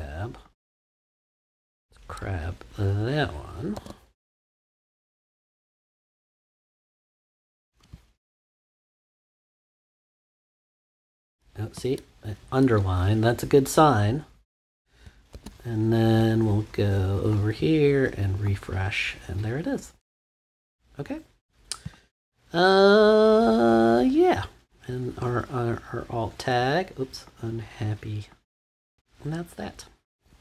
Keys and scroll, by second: 3.7 super+c, 9.1 super+v, 15.3 super+s.